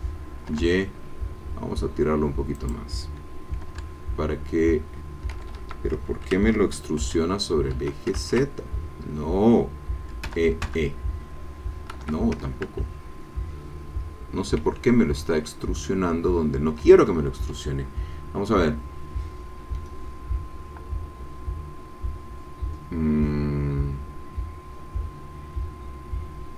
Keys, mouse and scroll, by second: 0.5 y, 2.5 click, 3.8 e, 5.3 Escape, 6.5 ctrl+z, 7.0 e, 7.7 Escape, 8.3 ctrl+z, 10.4 e, 11.9 Escape, 14.6 ctrl+z.